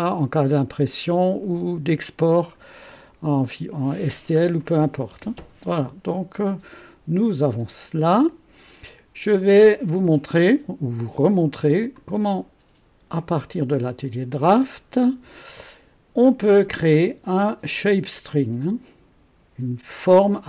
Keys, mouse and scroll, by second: 0.5-2.7 drag, 3.0 right click, 4.0 scroll down 1, 4.6 right click, 8.2-9.6 drag, 11.9 click, 14.6 click.